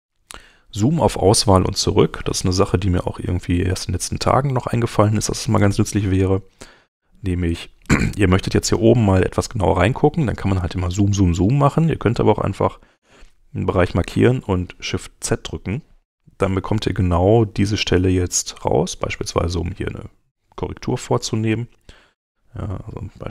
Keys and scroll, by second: 1.6 super+Tab, 15.2 shift+z, 22.4 v.